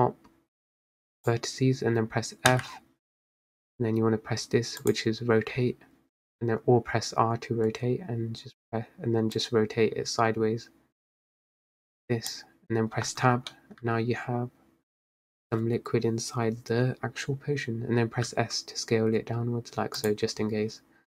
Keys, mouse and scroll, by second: 2.6 f, 4.9-8.1 drag, 9.5 click, 13.2 Tab, 13.7-15.3 middle drag, 15.3-16.5 scroll down 1, 16.5-18.3 scroll down 1, 18.4 s.